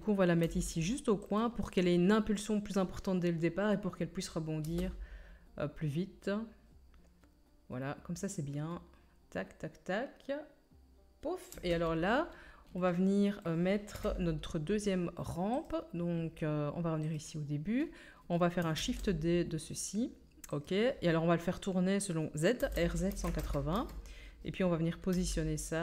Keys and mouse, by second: 0.4 g, 4.6 space, 11.5 space, 14.0 KP_1, 18.8 shift+d, 19.4-20.7 middle drag, 20.7-25.8 drag, 22.6 r, 25.1 g.